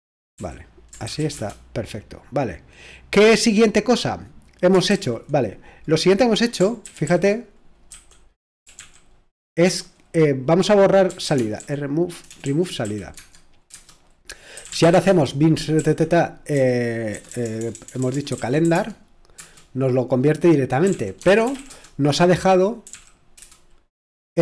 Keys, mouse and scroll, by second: 0.0-1.2 typing, 4.9 super+l, 6.8 ctrl+w, 7.1 ctrl+w, 7.9-9.6 typing, 10.8-11.7 typing, 12.8-13.1 typing, 14.5 Tab, 14.8 Return, 15.5-23.4 typing, 18.6 Right.